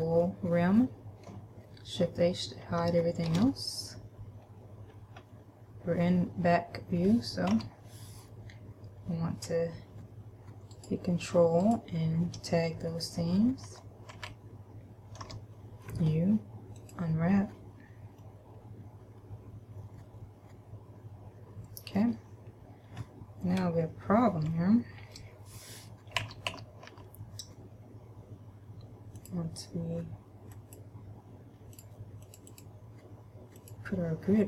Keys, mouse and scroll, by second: 3.5 shift+h, 4.7-5.1 scroll up 1, 5.2 scroll up 1, 5.5-6.2 scroll down 1, 6.2-7.0 scroll up 2, 7.7 a, 11.0 ctrl+right click, 11.9 ctrl+right click, 14.0 a, 14.5 a, 15.5 u, 18.5 middle click, 22.7-23.5 scroll up 1, 23.5-24.7 scroll up 1, 24.7 Left, 24.7 middle click, 25.5 Left, 26.5 a, 26.7 a, 27.2 a, 29.5 click, 32.0 click, 32.7 click.